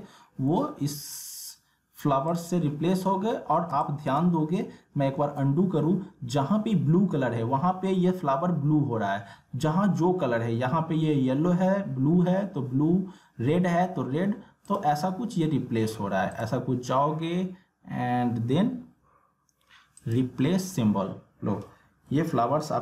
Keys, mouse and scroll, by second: 0.2 alt+scroll down 1, 1.1 click, 2.6 alt+scroll up 1, 3.3 alt+scroll down 1, 3.7 space, 3.8 click, 5.1 ctrl+z, 14.6 click, 20.0 click.